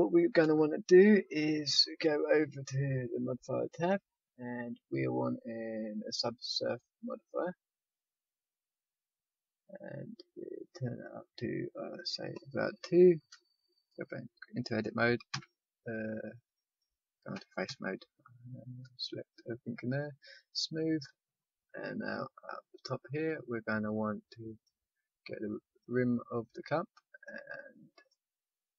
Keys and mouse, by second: 0.4 Tab, 3.6-7.4 drag, 10.6-13.1 drag, 12.0-13.1 middle drag, 13.1 Tab, 15.3 a, 16.6-22.7 drag, 17.3 a, 17.6 a, 20.9-28.7 middle drag, 22.7 right click, 23.1-24.5 drag, 24.5-28.7 right drag.